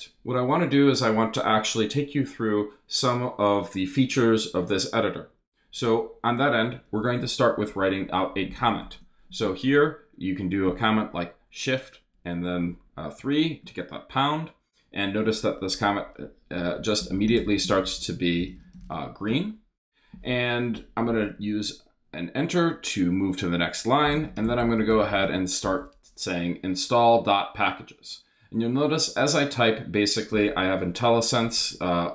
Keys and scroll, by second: 8.8 shift+3, 9.3 shift+space, 9.9 space, 16.3-19.3 typing, 23.8-26.1 typing.